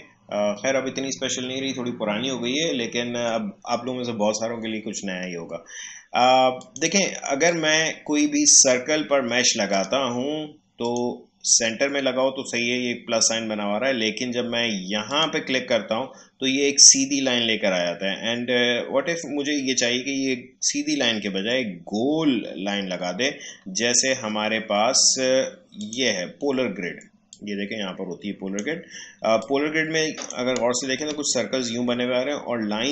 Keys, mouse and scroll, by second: 6.5 click, 7.5-9.7 shift+drag, 15.1 click, 25.8-32.9 drag.